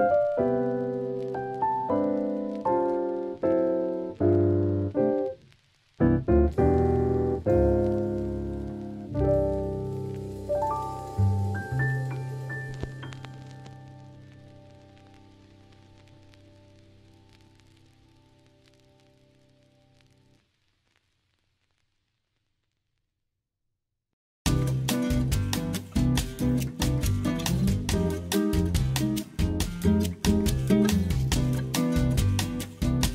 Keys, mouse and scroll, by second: 1.9-5.1 drag, 5.1 g, 5.8 click, 6.0 g, 6.4 click, 6.8 click, 8.0 g, 8.4 click, 8.8 click, 9.0 g, 10.5 click, 12.2 click, 13.1 Tab, 13.6-14.0 middle drag, 14.6 click, 15.4 click, 16.5 drag, 17.7 ctrl+z, 18.3-19.9 drag, 20.9 middle click, 21.8 KP_1, 22.6 Tab, 23.1 click, 24.1 ctrl+z, 25.2 click, 25.8 click, 26.8 click, 28.2 click, 29.3 click, 30.7 click, 31.1 click, 31.9 Tab, 32.1 click, 33.0 middle click.